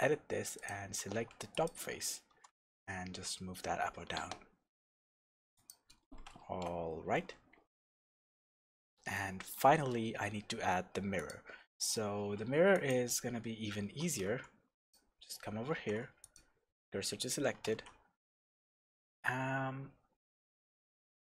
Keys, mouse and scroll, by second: 0.5 click, 1.1 alt+a, 1.5 click, 2.3 g, 5.7 click, 6.4 alt+h, 7.1 Tab, 7.9 alt+h, 9.1-11.2 shift+middle drag, 11.2 click, 11.8 click, 12.2 Tab, 12.7 click, 13.8 alt+a, 14.3 2, 14.8 click, 15.8 shift+s, 17.4-17.7 scroll up 1, 17.7 shift+a.